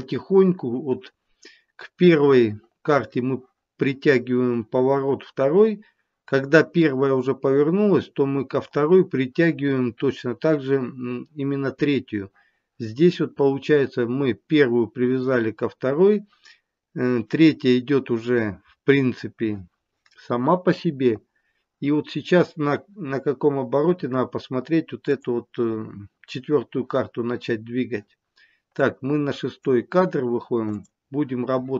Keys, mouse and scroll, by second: 25.0 click, 28.8 click, 30.7 click.